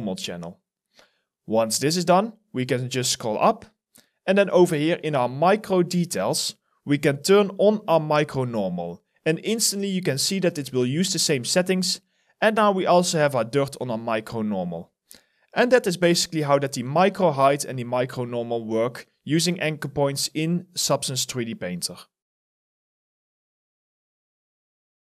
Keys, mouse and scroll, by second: 0.6-1.9 scroll up 1, 8.7 alt+middle click, 9.0 alt+scroll up 1, 9.5 alt+right click, 11.2 alt+middle click, 11.7 alt+click, 13.4 alt+right click, 15.0 alt+middle click, 15.6 alt+right click, 16.1 alt+click, 16.6 alt+middle click, 17.1 alt+click, 17.7 alt+middle click, 18.6 alt+click.